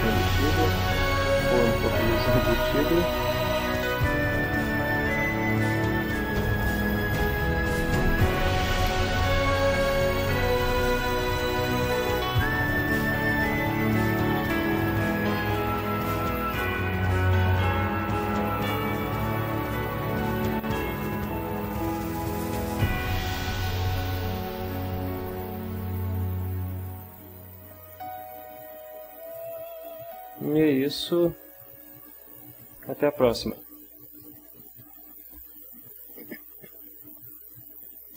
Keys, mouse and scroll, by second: 0.6 click, 1.4-2.5 drag, 2.7 click, 3.7 click, 4.4-5.7 drag, 5.8-7.9 drag, 8.5 click, 9.1-10.8 drag, 11.3-15.0 drag, 15.3-24.1 drag, 25.8-28.2 drag, 28.6 click, 33.9 click, 37.3 ctrl+s.